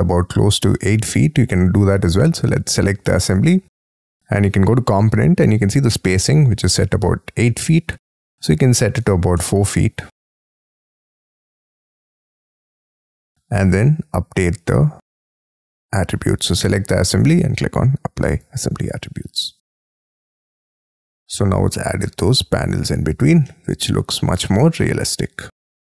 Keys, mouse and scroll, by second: 0.6 scroll down 6, 1.1 middle click, 9.1-9.9 typing, 12.0 middle click, 22.0 middle click, 23.5 middle click, 23.7-24.8 scroll down 21, 24.8 middle click.